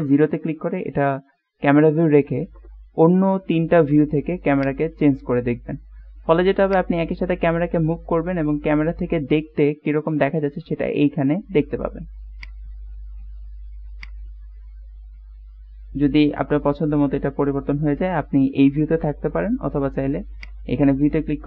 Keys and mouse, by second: 0.0 KP_0, 4.6 click, 6.9 click, 12.4 click, 14.1 click, 20.5 click.